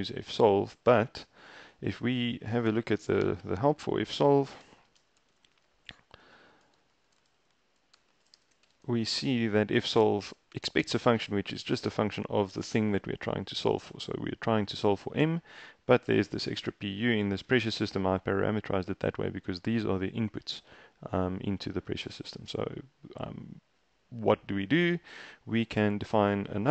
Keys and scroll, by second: 2.4-8.9 typing.